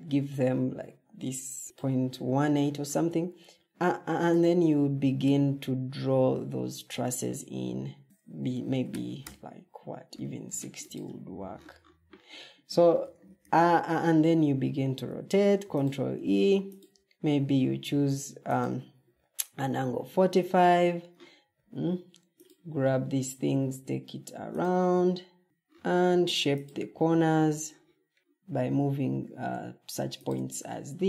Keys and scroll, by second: 8.0 Escape, 8.0 Tab, 8.0 Up, 8.4-9.2 typing, 12.9 ctrl+e, 19.9 ctrl+d, 21.6 Escape, 25.4 alt+g.